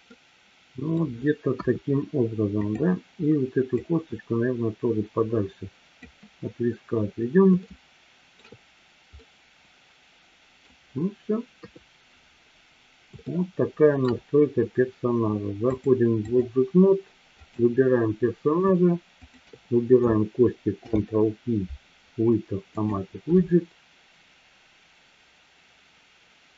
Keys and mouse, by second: 0.0-1.0 middle drag, 1.5 KP_1, 2.5 click, 3.8-6.0 drag, 7.7-8.5 shift+middle drag, 9.2-10.7 middle drag, 11.5 KP_3, 13.3 middle click, 15.7-16.8 drag, 17.3 click, 19.3 shift+click, 20.8 ctrl+p.